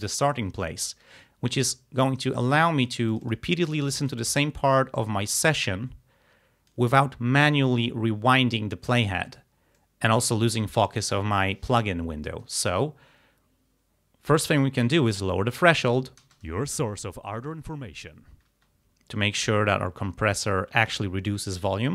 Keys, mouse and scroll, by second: 3.2 click, 4.0 click, 5.0-7.0 drag, 9.8 click, 14.9-16.0 drag, 16.3 space, 18.5 space, 19.6-21.1 drag.